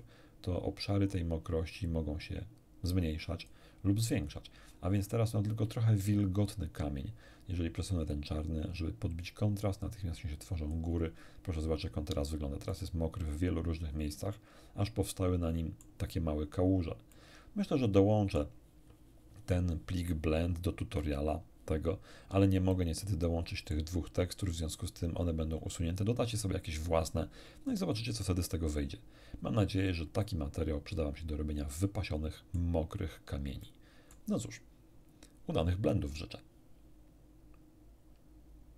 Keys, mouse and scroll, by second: 0.0-1.3 drag, 1.8-3.6 drag, 5.0 scroll down 1, 8.1-10.9 drag, 12.7-16.0 middle drag, 17.1-18.6 middle drag, 22.2-22.6 scroll down 2, 22.7-23.9 middle drag, 30.2-32.8 middle drag, 33.6 middle click.